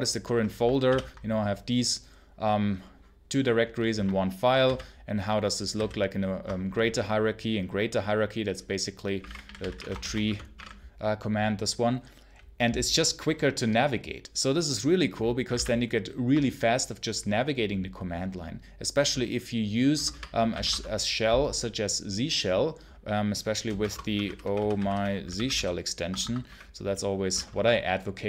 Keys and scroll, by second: 0.7 ctrl+k, 4.5 ctrl+j, 5.6 ctrl+h, 8.8-10.5 typing, 15.4 ctrl+c, 15.4 ctrl+k, 19.8 Return, 20.0-21.0 typing, 23.3-27.2 typing, 26.1 Escape.